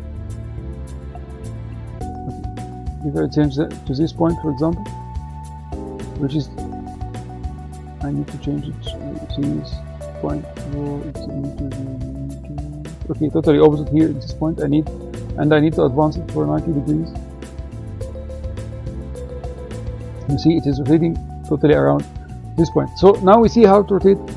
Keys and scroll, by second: 19.2 9.